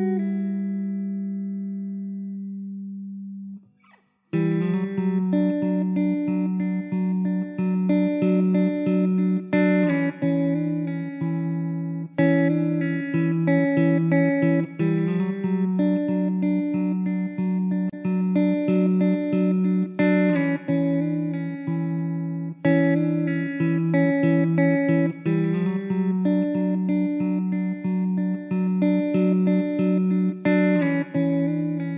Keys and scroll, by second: 2.7 shift+d, 4.3 ctrl+z, 5.4 KP_0, 7.7 shift+d, 11.6 Delete, 12.8 ctrl+s, 13.8 Tab, 15.1 l, 16.2 shift+d, 16.9 p, 17.8 Tab, 23.4 Tab, 24.0 alt+z, 25.1 3, 28.1 x, 29.1 alt+z, 29.8 2, 30.9 3, 31.8 2.